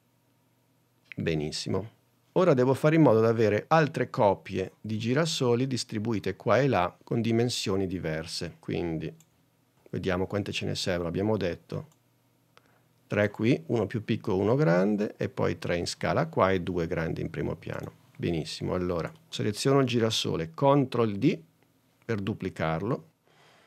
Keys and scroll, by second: 9.7 super+Tab, 21.3 super+d.